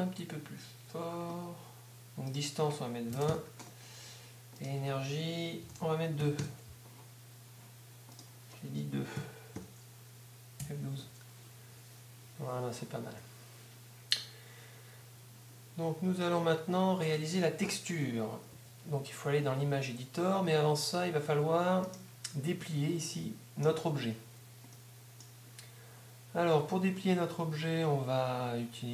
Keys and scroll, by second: 3.3 Return, 5.8 shift+., 9.6 Home, 10.6 F12, 18.5 Escape, 22.6 Tab, 25.2 z.